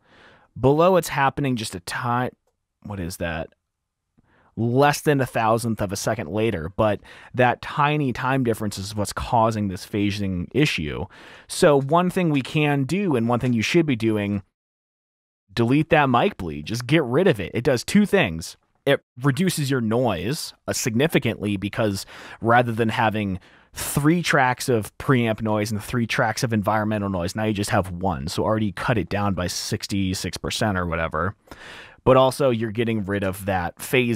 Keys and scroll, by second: 5.5 r, 8.5 r, 10.7-12.7 typing, 13.8 typing, 15.4 super+`, 16.8 super+`, 33.5 F7.